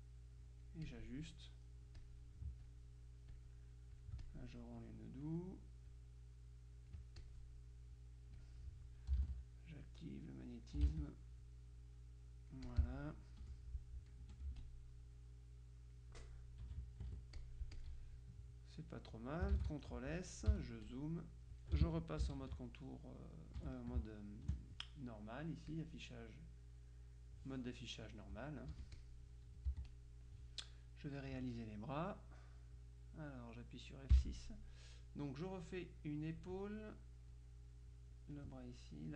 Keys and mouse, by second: 2.1-3.3 drag, 3.4-4.9 drag, 6.0-7.9 drag, 8.5 click, 9.9-11.3 drag, 11.8-13.5 drag, 13.5 F1, 14.5 F2, 14.7-16.5 drag, 16.7 KP_Subtract, 17.4-18.5 drag, 19.7 ctrl+s, 20.6 z, 21.0 click, 22.3 ctrl+KP_5, 23.3 right click, 23.7 F1, 24.1 space, 24.6 space, 25.8 click, 28.8 Escape, 29.1 click, 29.8 z, 30.0 click, 34.2 F6, 35.7-36.9 drag, 37.4-38.9 drag.